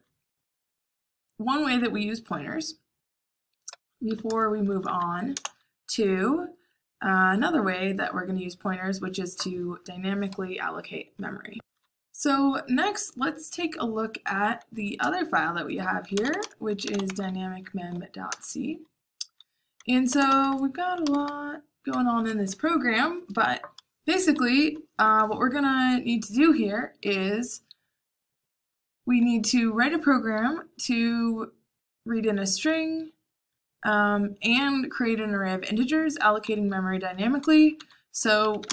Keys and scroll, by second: 0.0-2.3 typing, 4.2-5.3 typing, 15.8-17.4 typing, 18.2 Return, 19.7-22.7 typing, 25.0 typing, 37.3-38.7 typing.